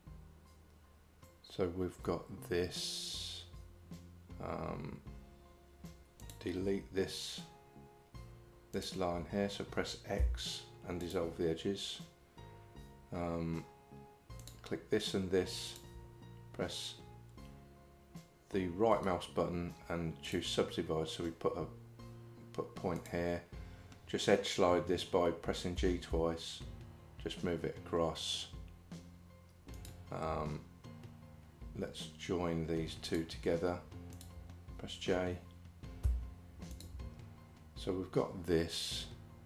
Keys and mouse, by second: 10.2 x, 14.4 click, 19.0-20.4 right drag, 23.0 click, 25.8 g, 34.2 shift+click, 36.0 j, 36.7 click.